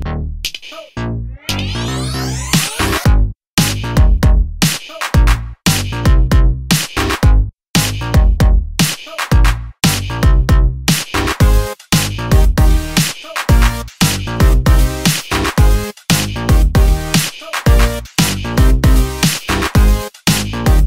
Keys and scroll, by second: 13.6 super+d.